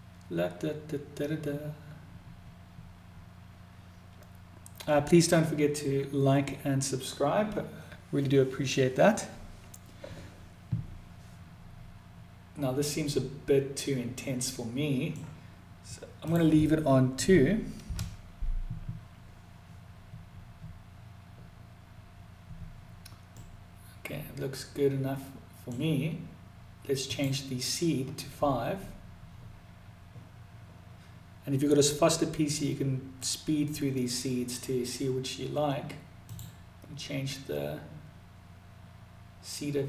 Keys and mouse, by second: 12.5-14.5 middle drag, 15.7-21.6 drag, 22.7-25.1 middle drag, 26.5-32.2 drag, 35.7-39.8 drag.